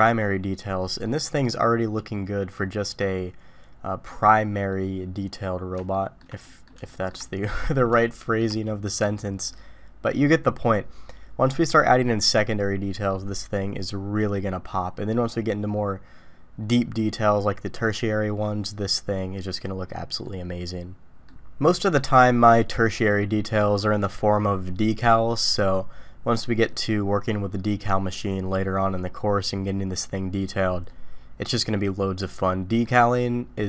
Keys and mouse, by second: 1.0-4.1 middle drag, 5.9 shift+middle drag, 6.4 middle click, 6.9 shift+middle drag, 7.3 middle click, 8.0-8.4 shift+middle drag, 9.5-10.3 middle drag, 20.2-32.8 middle drag.